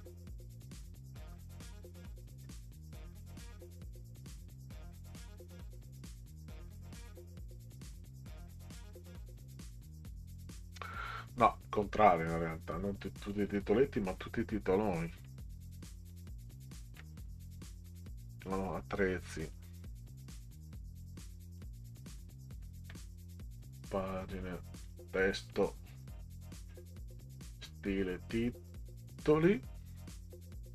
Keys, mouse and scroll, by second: 0.6 scroll down 4, 1.3 scroll down 2, 2.4-2.9 scroll down 6, 6.7-7.3 scroll down 6, 9.4 middle click, 10.8 middle click, 12.3 middle click, 13.2 click, 13.5 click, 14.9 scroll down 2, 15.9 click, 16.1 click, 17.9 click, 19.3 click, 19.5 click, 20.3-21.6 drag, 23.6 click, 24.8 click, 27.5 click.